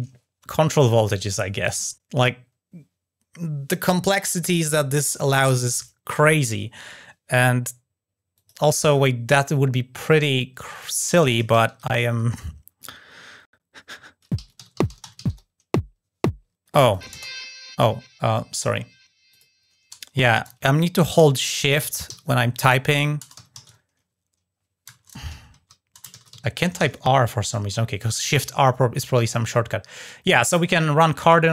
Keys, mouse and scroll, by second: 8.1 click, 9.8 click, 10.5 click, 10.6 click, 16.6 drag, 19.0 click.